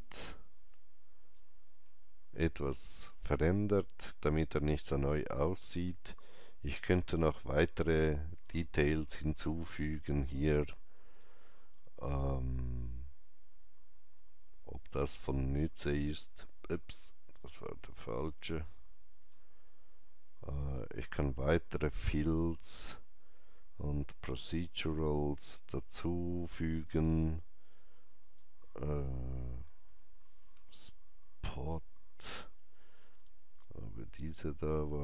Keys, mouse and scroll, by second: 0.6-10.9 alt+drag, 1.8 alt+middle click, 14.7-17.3 alt+drag, 17.8 click, 25.2 click, 25.2 scroll up 1, 26.7 click, 28.1 click, 29.3-30.9 typing.